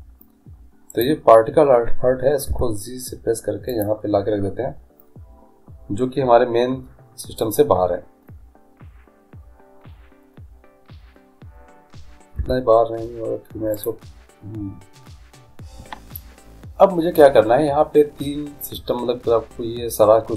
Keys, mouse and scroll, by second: 1.1-2.9 right drag, 2.7 g, 8.4-12.5 middle drag, 12.5 g.